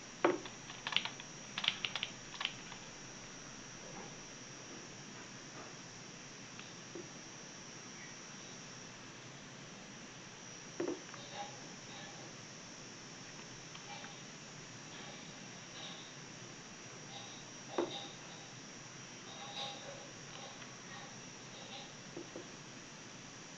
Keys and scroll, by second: 12.0 w, 15.0 e, 19.2 a.